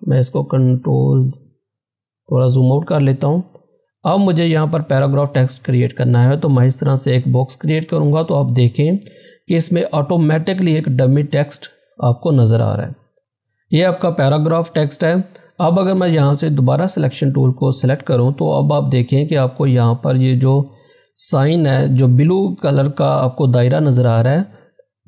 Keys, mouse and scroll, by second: 0.0 ctrl+-, 1.2-3.0 scroll down 1, 4.4-10.1 drag, 10.1 scroll down 1, 16.6 click.